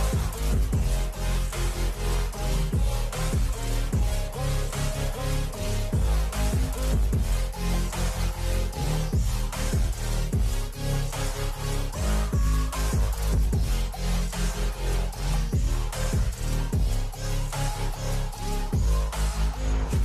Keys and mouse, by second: 0.9 Return, 2.1 shift+Up, 2.4 shift+Up, 3.2 v, 4.0 shift+Up, 5.3 shift+Up, 5.5 shift+Up, 6.0 shift+Left, 6.2 shift+Left, 6.4 shift+Left, 6.6 shift+Up, 7.5 Up, 7.7 Up, 8.3 Up, 8.5 Right, 9.0 Down, 10.7 ctrl+h, 12.5 ctrl+t, 15.6 Return, 16.5 Left, 16.7 Left, 17.3 Right, 17.6 Right, 19.3 click.